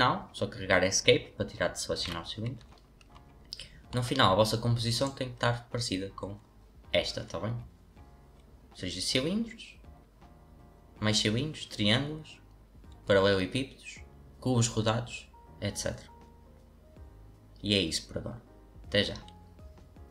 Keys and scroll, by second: 2.0 Escape.